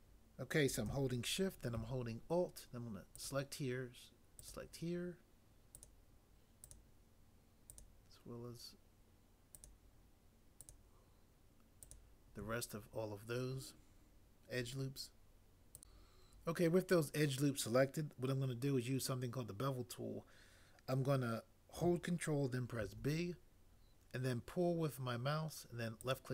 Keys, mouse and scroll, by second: 22.8 ctrl+b.